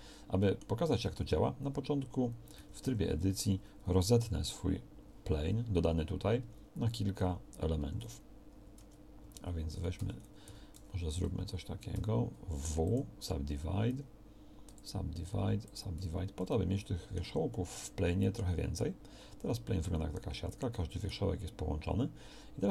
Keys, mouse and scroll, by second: 1.1 Tab, 2.6 a, 2.9 a, 6.4 w, 7.8 Escape, 8.8 Tab, 9.3 Tab, 9.8 a, 10.0 a, 10.5 w, 10.8 w, 12.0 w, 13.9 w, 15.4 w, 16.0 z.